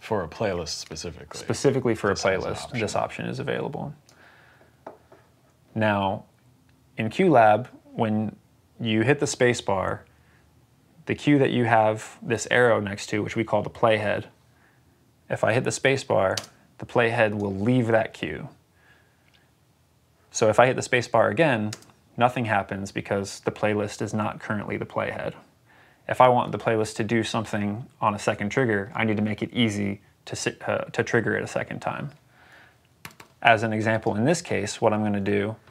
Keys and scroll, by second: 16.3 space, 21.6 space.